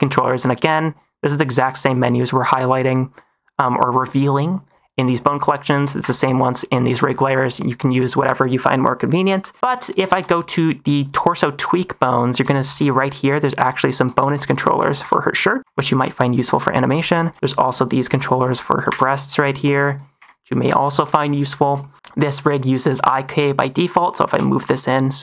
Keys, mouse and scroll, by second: 0.1 n, 1.4 click, 1.8 click, 5.7 n, 5.9 n, 7.5 click, 9.7 middle click, 10.9 click, 11.3 click, 12.4 shift+middle click, 13.2 click, 13.7 shift+click, 14.1-16.5 typing, 14.5 shift+middle click, 17.0 shift+middle click, 17.3 click, 17.8 shift+click, 18.4 -, 18.7 r, 18.8 r, 20.1 g, 20.9 shift+middle click, 21.4 -, 21.7 shift+middle click, 23.3 middle click, 24.2 g.